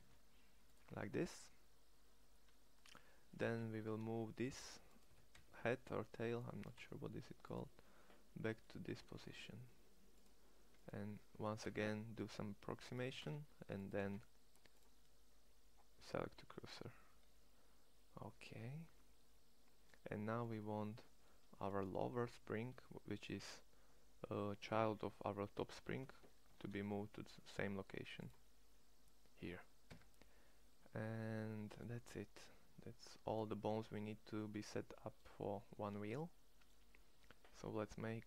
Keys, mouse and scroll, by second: 1.4 middle click, 3.1 g, 4.8 g, 6.3 g, 8.9 shift+s, 11.1 g, 12.7 g, 13.8 shift+s, 18.0 middle click, 18.1 middle click, 18.3 middle click, 22.4 g, 26.3 shift+s, 29.7 Tab, 37.6-38.2 middle drag.